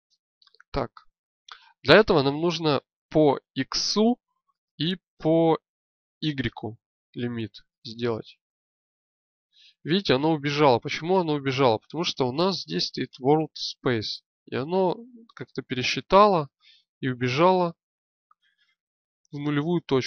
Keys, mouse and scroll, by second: 7.3-12.1 drag, 15.9 click, 17.4 alt+z.